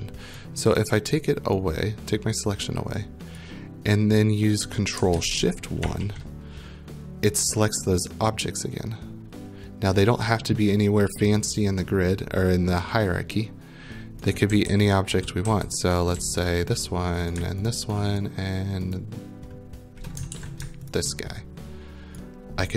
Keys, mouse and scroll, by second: 0.6 right click, 1.2 click, 3.3 right click, 5.8 ctrl+shift+1, 10.2-11.1 scroll, 14.3-16.7 typing, 15.8 right click, 16.4 right click, 16.7 click, 17.3 right click, 17.7 shift+click, 18.2 shift+click, 19.0 shift+click, 20.3 ctrl+z, 22.2 right click.